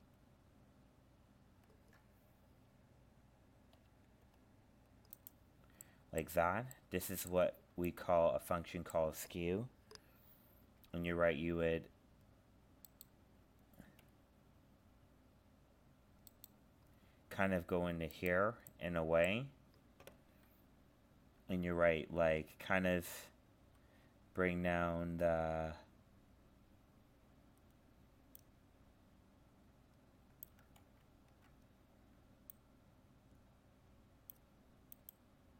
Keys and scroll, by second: 30.8 ctrl+z.